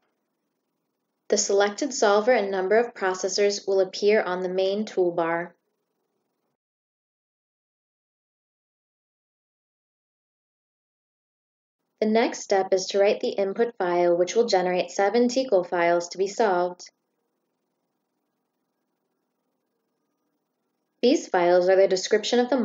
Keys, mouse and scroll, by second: 11.3 click, 17.4 click, 21.0 click, 21.5 click.